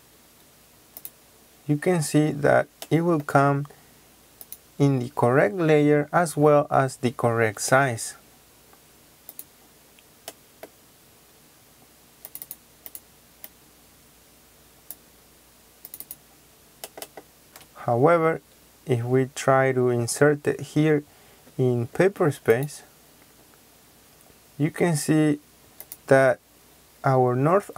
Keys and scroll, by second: 7.7 Escape, 17.4 Escape.